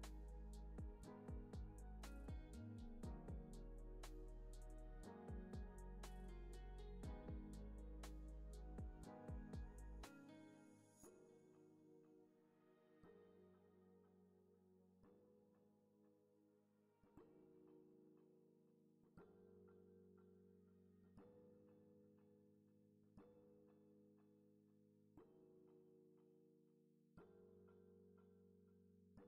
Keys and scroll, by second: 6.9 super+c, 7.1 super+v, 7.5 alt+x, 8.9 super+c, 9.0 super+v, 10.4 super+c, 10.8 super+v, 11.9 alt+x, 14.9 alt+x, 22.5 super+c, 23.3 super+v, 24.0 alt+w, 24.5 x.